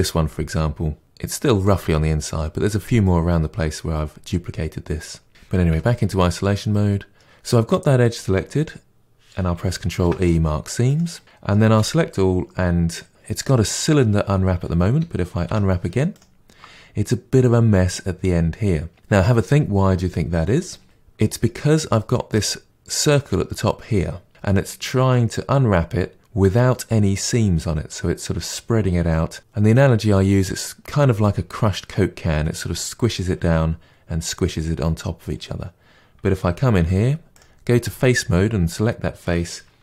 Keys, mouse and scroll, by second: 10.9 ctrl+e, 11.2 middle click, 11.6 a, 16.1 u, 20.8-36.7 middle drag, 36.7 3, 37.3 click.